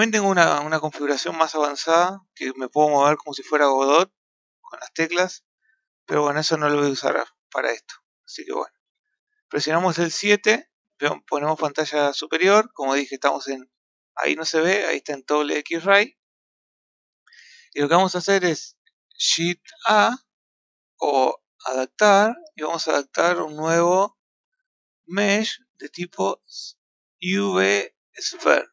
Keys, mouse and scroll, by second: 0.9 right click, 6.8-7.8 middle drag, 8.8 KP_7, 12.5 z, 14.4 z, 19.6 shift+a, 21.8-24.8 drag.